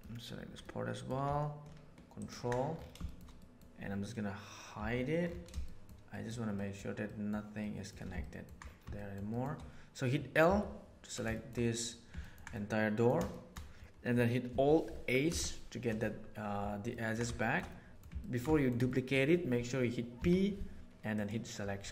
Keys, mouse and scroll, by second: 0.6 middle click, 2.1 ctrl+click, 3.0 shift+middle click, 3.3 middle click, 4.7 h, 5.6 shift+middle click, 6.5 middle click, 7.0 middle click, 7.6 middle click, 8.2 ctrl+middle click, 8.9 shift+middle click, 9.3 shift+middle click, 10.4 l, 11.3 shift+middle click, 12.6 middle click, 13.3 shift+click, 15.2 alt+h, 16.9-17.9 ctrl+middle drag, 18.1 ctrl+shift+middle click, 20.1 p, 21.8 Tab.